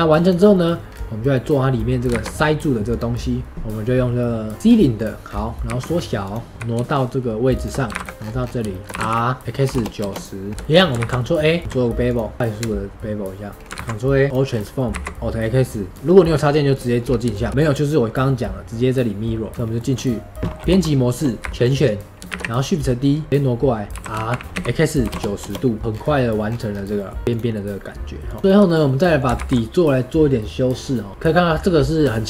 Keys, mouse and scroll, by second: 0.4-0.8 middle drag, 0.8 scroll down 1, 1.7-2.0 middle drag, 2.0 shift+a, 4.6-4.9 scroll down 1, 4.9 middle drag, 5.2-5.6 scroll down 1, 5.6 s, 6.5 g, 8.1-9.5 scroll up 9, 8.6 shift+middle click, 10.4 scroll up 1, 10.5-10.9 middle drag, 10.9 ctrl+a, 11.6 q, 13.6 middle click, 13.7 ctrl+a, 14.4 scroll down 3, 14.7 middle drag, 14.9 alt+x, 15.9 scroll up 6, 16.6 click, 16.9-17.2 scroll up 1, 17.2-19.5 shift+middle drag, 19.5 click, 19.5 middle click, 19.9-20.6 scroll down 1, 20.6 KP_3, 21.3 a, 21.5 shift+middle click, 21.5-22.0 scroll up 2, 22.2 shift+d, 25.8 middle click, 25.8 scroll down 2, 26.0 middle click, 26.4 scroll down 2, 26.6 scroll up 1, 26.9-27.6 middle drag, 27.6 click, 28.4 shift+middle click, 29.3 ctrl+a, 31.1 click.